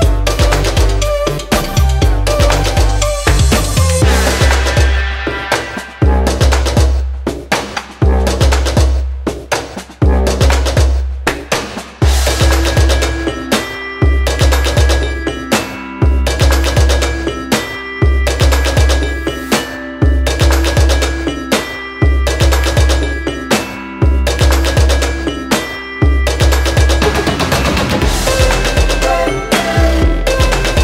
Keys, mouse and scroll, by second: 2.5-3.5 drag, 8.8 click, 11.3-13.5 drag, 16.4-20.2 drag, 30.4-30.8 drag.